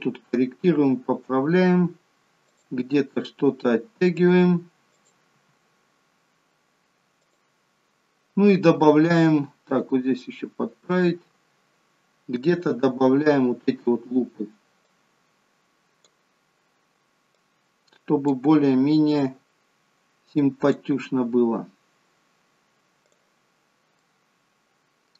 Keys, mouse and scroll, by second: 0.0 middle click, 2.4 click, 2.8 g, 4.9 click, 5.4 g, 9.7 click, 10.0 g, 12.5 click, 14.8 click, 17.3 click, 20.4 click, 23.0 click, 24.0 middle click.